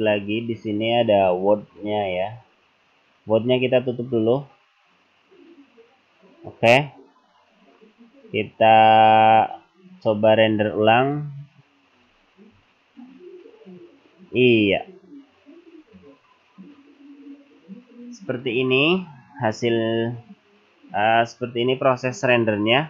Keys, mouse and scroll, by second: 1.4 click, 2.5-3.3 scroll up 3, 4.1 click, 9.5 click, 11.0 click.